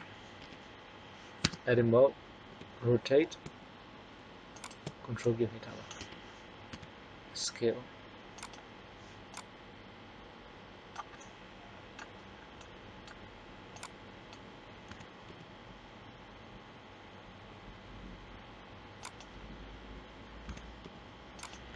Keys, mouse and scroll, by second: 0.4 KP_3, 1.4 Tab, 2.5 r, 5.2 middle click, 6.0 KP_1, 6.7 s, 9.6-11.3 drag, 11.3 middle click, 13.7 click, 14.8 s, 20.4 s.